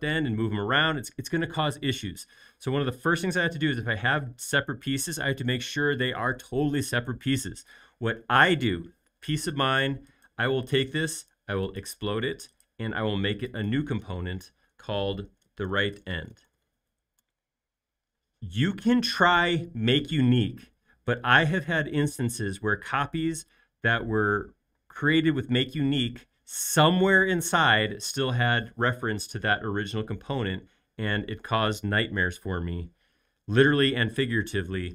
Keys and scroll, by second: 15.1-16.9 typing, 17.1 Return.